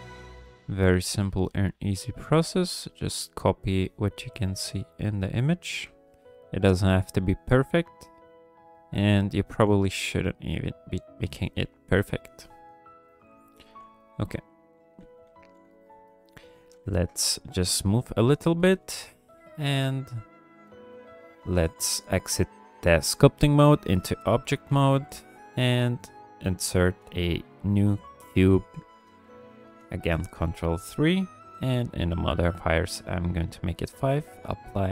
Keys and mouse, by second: 0.3 f, 0.8 click, 2.2 f, 2.8 click, 4.3 click, 5.8 f, 6.6 click, 7.4 click, 8.4 click, 9.4 f, 10.1-11.2 drag, 11.9 KP_1, 12.9 f, 13.2 click, 13.5 f, 14.1 click, 15.0 f, 15.7 shift+click, 16.9 ctrl+click, 17.1 click, 17.2 middle click, 17.5 shift+click, 17.9 shift+click, 18.1 shift+click, 18.4 shift+click, 18.8 middle click, 19.1 ctrl+click, 19.3 middle click, 19.4 middle click, 19.6 click, 19.6-20.9 middle drag, 21.0 ctrl+middle click, 23.4 click, 24.1 drag, 24.7 alt+a, 24.9 drag, 25.8 shift+drag, 26.6 alt+a, 29.7 ctrl+3, 31.4 click, 32.4 click, 32.9 click, 33.7-34.4 drag.